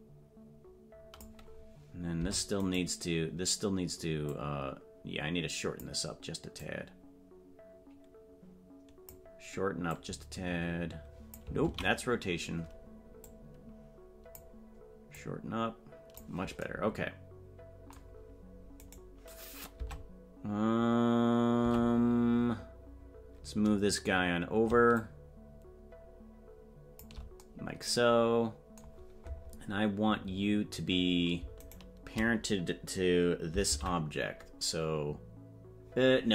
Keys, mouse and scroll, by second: 2.2 Tab, 2.7 right click, 4.2-5.8 drag, 6.5-9.1 drag, 9.9-11.3 drag, 12.7 ctrl+z, 13.2-14.3 drag, 15.1-16.2 drag, 18.9 right click, 19.7 Tab, 24.9-27.5 shift+drag, 31.7 shift+right click, 33.6 ctrl+p.